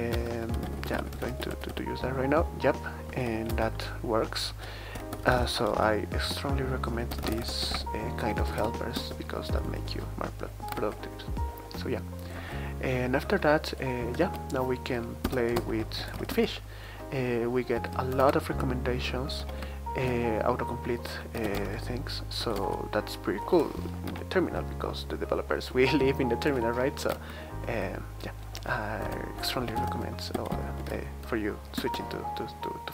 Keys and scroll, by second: 0.1 Return, 0.3-2.0 typing, 3.1-9.1 typing, 10.8 super+t, 12.3 super+t, 13.2 super+t, 14.2 super+q, 15.2 Return, 15.5 super+space, 15.5-16.6 typing, 18.1 ctrl+alt+Return, 18.8 ctrl+alt+Left, 19.2 ctrl+alt+Right, 19.4 ctrl+alt+Left, 21.1-22.9 typing, 24.1 Right, 25.4-26.5 typing, 27.1 Tab, 27.6 Tab, 29.0 Return, 29.3-31.3 typing, 31.7 Return, 32.8 typing.